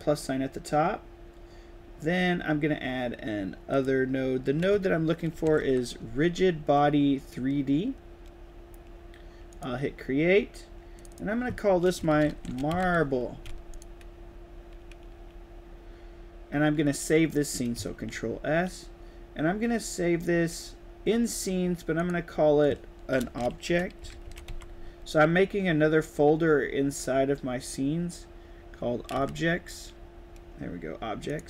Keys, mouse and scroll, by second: 3.6 click, 5.6 g, 9.5 click, 10.9 click, 11.0 click, 12.1 a, 12.8 e, 13.6 click, 17.8 ctrl+s, 23.8-24.7 typing, 29.1 s, 31.2 click.